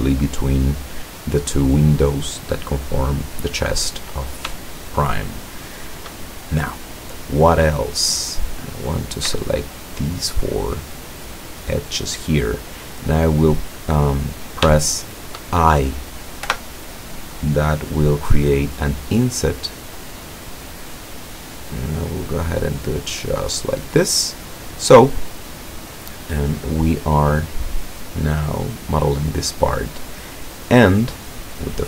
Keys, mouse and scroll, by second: 5.0-6.2 shift+middle drag, 7.8-8.2 scroll down 1, 8.9 right click, 9.5 shift+right click, 10.9 shift+right click, 11.7 shift+right click, 13.1 middle click, 14.0 scroll up 2, 15.0 shift+middle click, 16.5 i, 23.3 click, 31.7 click.